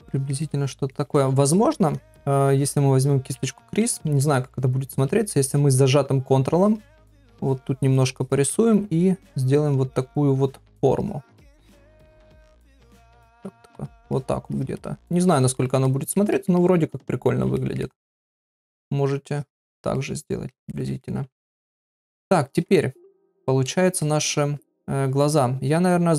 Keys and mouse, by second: 0.2 ctrl+middle click, 0.4 middle click, 3.3 [, 3.4 [, 3.7 [, 3.8 [, 4.2 middle click, 5.1 middle click, 6.5 click, 7.0 click, 7.4 ctrl+click, 7.9 ctrl+click, 8.2 ctrl+click, 8.5 middle click, 9.2 ctrl+click, 9.3 ctrl+click, 9.9 middle click, 11.0 ctrl+click, 11.2 ctrl+click, 11.5 ctrl+click, 11.9 ctrl+click, 12.9 middle click, 13.2 ctrl+z, 13.6 ctrl+click, 13.9 ctrl+click, 14.1 ctrl+click, 14.5 ctrl+click, 14.8 middle click, 15.6 ctrl+middle click, 15.9 middle click, 16.3 ctrl+middle click, 16.6 middle click, 17.6 ctrl+middle click, 17.8 middle click, 19.3 ctrl+click, 19.6 ctrl+click, 20.0 middle click, 20.7 ctrl+middle click, 21.0 middle click, 21.6 shift+middle click, 24.0 ctrl+middle click.